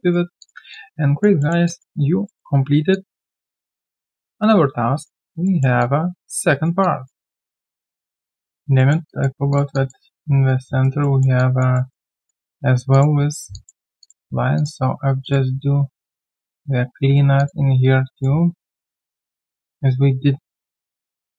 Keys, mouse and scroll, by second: 0.0 alt+right click, 0.7 alt+click, 1.4 alt+middle click, 1.6 alt+click, 2.2 alt+middle click, 2.6 alt+right click, 2.9 alt+click, 5.4 alt+middle click, 5.8 alt+click, 6.5 alt+right click, 6.8 alt+click, 7.3 alt+middle click, 8.1 alt+click, 8.7 alt+middle click, 9.1 alt+click, 9.7 alt+click, 10.4 right click, 11.0 alt+middle click, 11.3 alt+click, 11.7 alt+middle click, 12.1 alt+click, 13.5 alt+click, 14.0 shift+click, 17.3 shift+click, 19.3 shift+click, 20.6 shift+click.